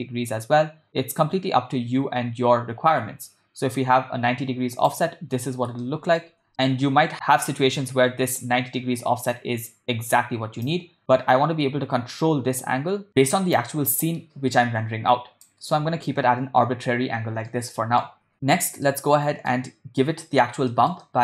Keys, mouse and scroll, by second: 5.9 ctrl+middle click, 10.7-13.1 drag, 13.6-15.6 drag, 17.6-18.0 ctrl+middle drag, 18.9-19.5 middle drag, 20.7 ctrl+middle click, 21.0 middle click.